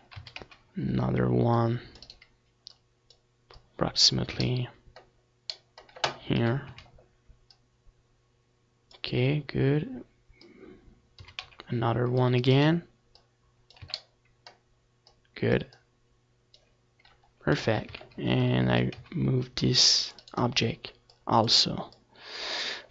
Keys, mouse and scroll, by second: 0.4 KP_7, 0.7 z, 1.6-3.4 drag, 4.5-6.3 drag, 5.5 a, 5.7 c, 6.9-8.7 right drag, 7.6-8.7 drag, 8.2 z, 8.3 middle click, 11.1 click, 12.1 KP_7, 12.3 z, 13.3 a, 13.5 c, 14.9-16.9 right drag, 15.8 click, 16.9-19.8 drag, 17.6 r, 18.1 a, 18.6 c, 19.3-21.4 right drag, 20.1-21.1 drag, 21.4 click, 21.4 r, 22.0-22.9 drag, 22.0 a, 22.3 c.